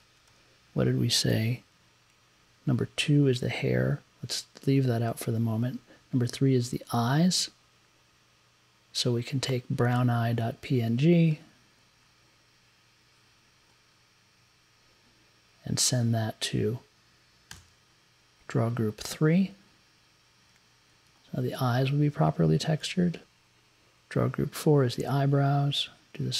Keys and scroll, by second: 1.7 Up, 5.0 Up, 17.5 3, 23.2 Up.